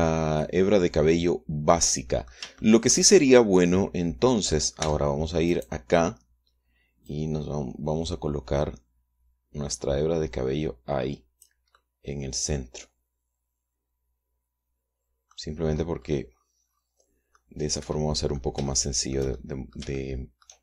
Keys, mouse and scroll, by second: 5.5 Tab, 6.2 click, 7.8-12.3 drag, 12.4-16.2 middle drag, 18.0-19.2 middle drag, 19.4 shift+middle click, 20.2-20.6 shift+middle drag.